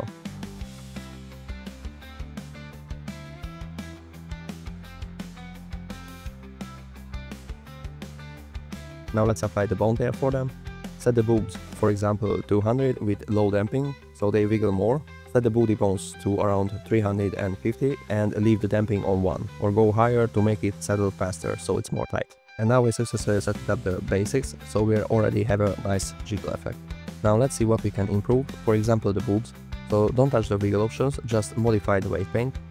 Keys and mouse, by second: 0.5 middle click, 1.4-2.6 drag, 3.1-4.0 drag, 4.3 click, 6.3 click, 7.1-7.4 middle drag, 8.2 click, 8.9 click, 9.7 click, 9.8-11.5 drag, 11.2 KP_0, 12.2 click, 12.5 KP_0, 13.1 click, 14.3 click, 15.4 click, 17.2 click, 18.9 click, 19.5 click, 20.0 g, 21.4 click, 22.4 g, 23.3 right click, 23.6 middle click, 24.2 click, 24.4 g, 25.3 right click, 25.6 middle click, 26.0 g, 27.1 click, 27.7 g, 28.7 click, 29.2 space, 29.3 space, 32.4 f.